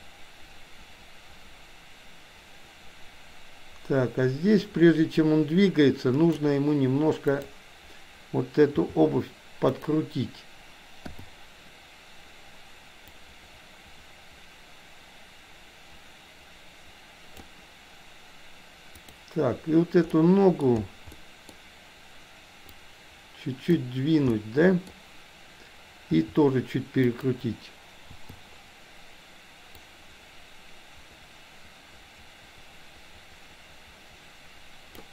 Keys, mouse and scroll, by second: 7.3 click, 8.8 r, 11.0 i, 13.0-17.4 drag, 19.0 click, 20.1 middle click, 21.1 middle click, 22.8-23.8 drag, 24.3 middle click, 26.1 r, 28.1 i, 29.8-35.0 drag.